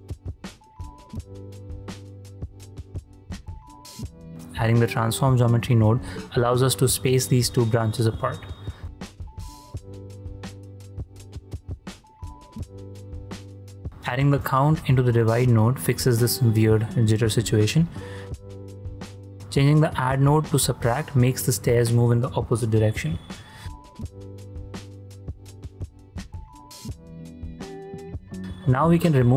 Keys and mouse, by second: 0.0 ctrl+space, 0.7 click, 1.1 ctrl+drag, 2.0 shift+space, 3.8 shift+a, 5.6 click, 6.0 shift+click, 6.5 ctrl+click, 6.9 shift+click, 8.2 click, 10.4 click, 11.1 click, 11.3 shift+d, 12.0 click, 12.9 click, 15.5 ctrl+space, 16.1 ctrl+space, 16.7 shift+space, 16.9-17.4 drag, 17.7 shift+click, 18.1 drag, 18.6 shift+space, 19.3 shift+space, 20.9 shift+space, 21.5-21.9 drag, 22.5 shift+click, 22.9 shift+space, 24.1 shift+space, 24.6 shift+space, 25.4 click, 26.1 ctrl+h, 26.5 ctrl+h, 27.5 h, 28.2 shift+click, 29.1 click.